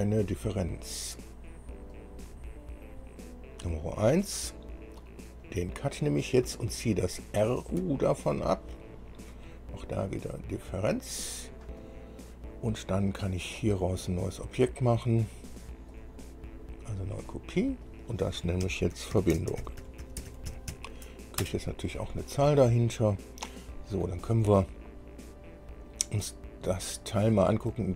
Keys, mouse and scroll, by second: 2.1 click, 4.9 scroll down 2, 5.7 click, 7.6 ctrl+click, 10.2 click, 11.3-11.6 scroll down 2, 12.0 click, 16.1 click, 17.2 scroll down 2, 18.1 click, 18.9 F2, 19.4-20.9 typing, 21.6 Return, 23.1-24.5 drag.